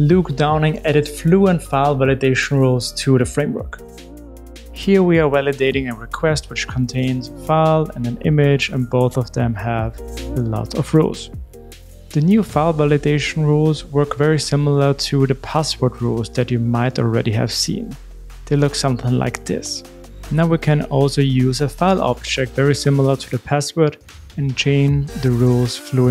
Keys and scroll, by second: 13.5 super+v, 22.0 super+x.